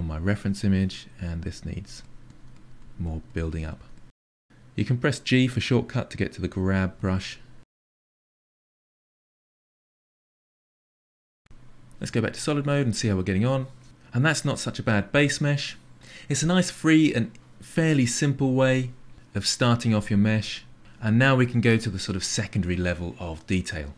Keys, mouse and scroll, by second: 0.1 click, 0.9 KP_3, 1.5 click, 3.1 g, 4.9 f, 5.1-6.4 drag, 6.4 shift+middle click, 6.7 click, 7.5 shift+middle click, 8.2 g, 8.4 f, 8.7 click, 9.2 shift+middle click, 9.5-10.8 drag, 10.8-12.4 ctrl+middle drag, 12.4 z, 12.9 middle click.